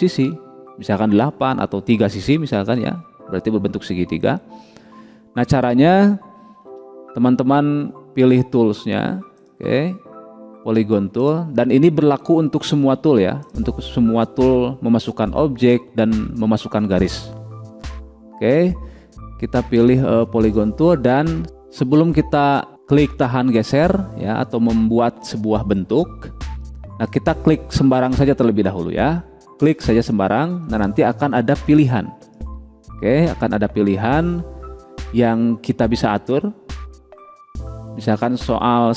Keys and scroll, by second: 7.1 Delete.